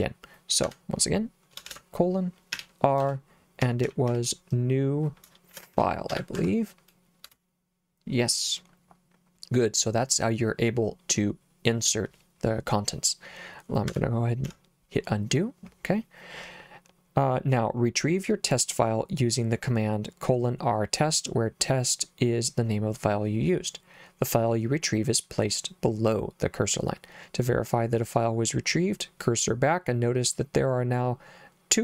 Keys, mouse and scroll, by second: 0.7 Escape, 1.7-6.7 typing, 7.3 Return, 14.5 u.